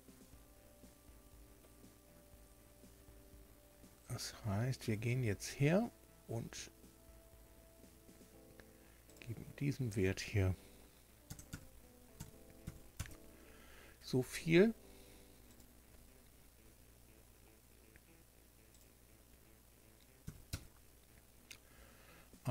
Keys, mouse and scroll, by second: 0.0-0.4 scroll up 1, 9.0 click, 11.2 KP_0, 11.4 KP_Decimal, 12.1 KP_9, 12.6 KP_5, 12.9 KP_Enter, 15.4 click, 18.7 click, 20.2 KP_1, 20.4 KP_Enter.